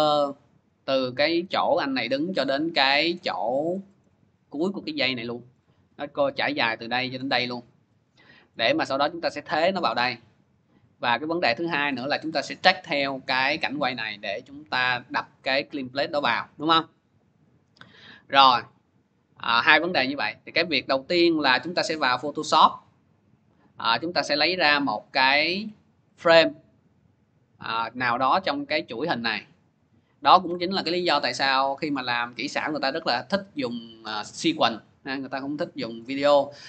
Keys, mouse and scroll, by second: 3.2 scroll, 3.9 scroll, 3.9 middle click, 5.5 middle click, 7.0 middle click, 8.4 middle click, 8.7 middle click, 8.7 scroll, 19.8 click, 21.5 click, 24.4 click, 26.0 click, 30.2 click.